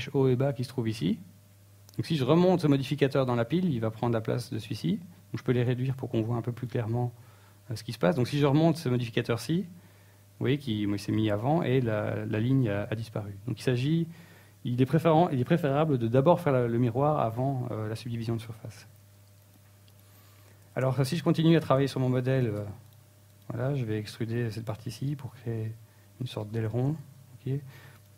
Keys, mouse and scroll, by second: 9.7 click, 10.1 click, 10.7 click, 13.5 click, 23.7 click, 24.2 click, 25.1 Tab, 25.3 middle click, 26.1 ctrl+Tab, 27.1 right click, 27.5 shift+right click, 28.0 middle click.